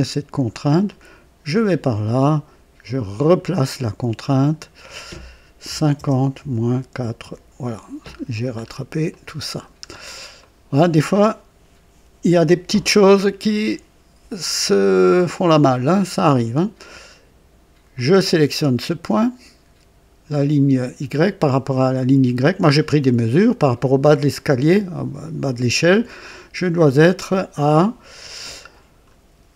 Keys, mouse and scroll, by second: 0.8-1.9 drag, 3.1 click, 4.3 click, 5.6 KP_5, 5.9 KP_0, 6.3 KP_Subtract, 6.8 KP_4, 7.1 Return, 8.0-8.8 scroll down 4, 9.0 right click, 9.8-10.2 scroll down 2, 10.3 middle click, 12.8 scroll up 1, 13.4 middle click, 13.7 right click, 17.9 click, 28.1 l, 28.3 l.